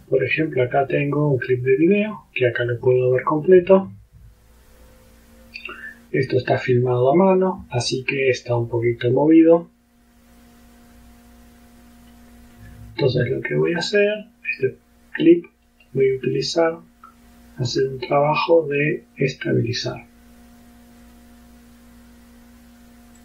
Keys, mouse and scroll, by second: 1.8 click, 12.6 click, 15.7 right click, 21.1 click.